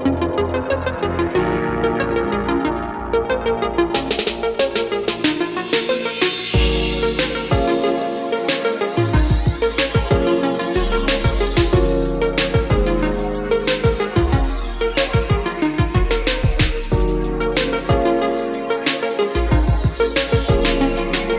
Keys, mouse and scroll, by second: 7.8 KP_4, 10.0 click, 10.5-11.1 scroll up 1, 12.2-12.9 scroll down 1, 12.9-17.8 drag, 19.0-21.3 scroll down 1.